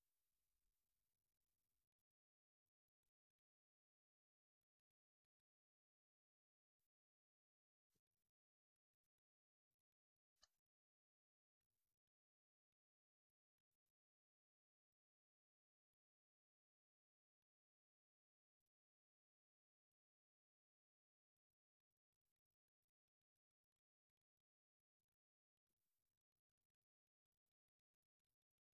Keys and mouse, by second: 0.3-1.5 drag, 1.5 v, 2.8 click, 3.5-5.2 drag, 6.5 click, 6.9 s, 8.5 click, 9.0-13.5 drag, 13.5 space, 14.7 alt+shift+z, 18.4 space, 19.2-22.2 drag, 24.6 click, 28.1-28.7 drag.